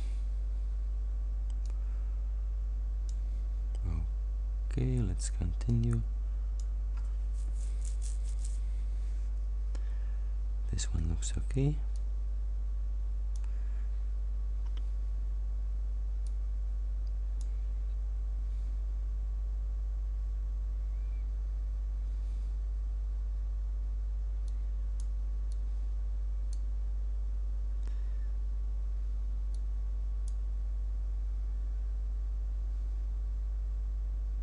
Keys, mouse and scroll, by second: 1.7-3.3 drag, 5.7 click, 12.1-13.7 drag, 16.3 click, 24.5 click, 25.5-26.8 drag, 29.6 click.